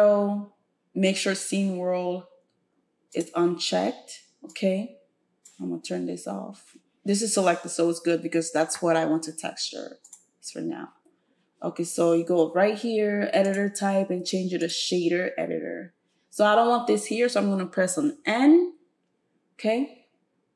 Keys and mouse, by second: 4.5-10.1 drag, 13.4-20.5 drag, 18.1 n.